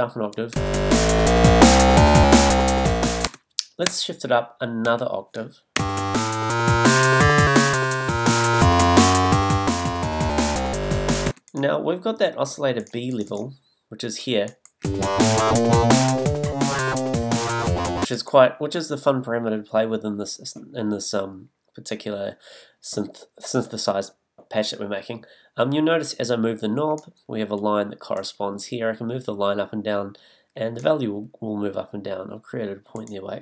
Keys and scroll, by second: 1.5 space, 3.2 space, 6.7 space, 11.3 space, 14.8 space, 18.0 space.